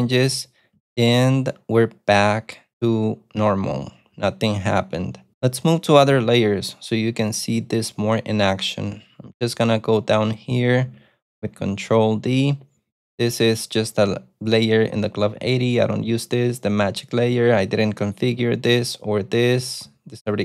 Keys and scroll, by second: 0.8 u, 10.9 ctrl+d, 11.7 ctrl+d, 12.8 ctrl+u, 15.0 ctrl+d, 15.2 ctrl+d, 16.0 ctrl+d, 17.7 ctrl+d, 18.8 ctrl+d, 19.1 ctrl+d, 19.9 ctrl+d.